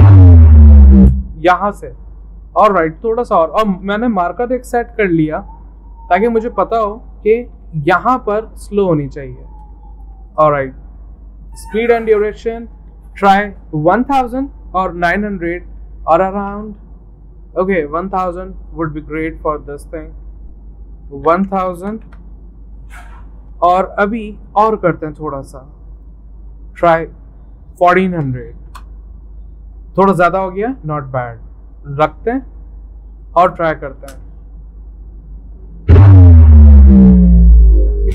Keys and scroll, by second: 5.7 n, 7.5 m, 10.0 v, 15.7-16.7 typing, 21.0-22.7 typing, 26.0-28.9 typing.